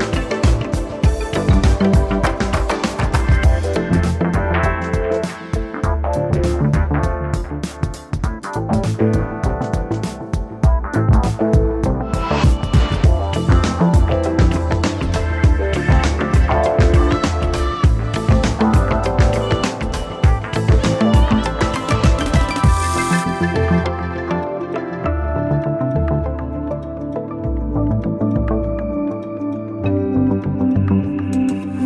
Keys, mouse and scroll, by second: 2.6 typing, 8.7-9.6 typing, 10.9 5, 11.3 Return, 12.6 0, 13.8 space, 15.0 ., 21.3 ctrl+z, 25.9 7, 26.1 Return, 28.9-29.8 typing.